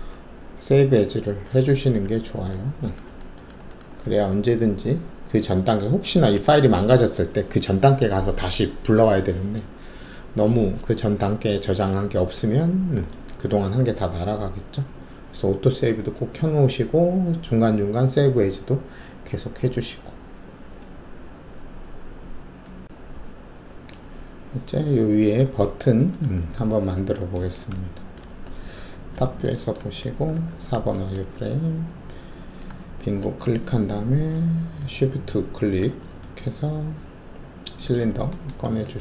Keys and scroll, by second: 0.5 typing, 28.7 alt+shift+2, 30.3 alt+4.